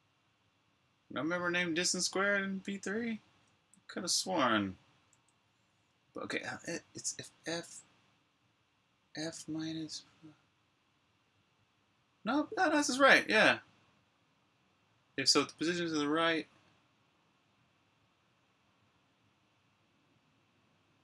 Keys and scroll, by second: 0.2-0.9 typing, 3.4 h, 5.3-6.1 typing, 12.6-12.9 typing.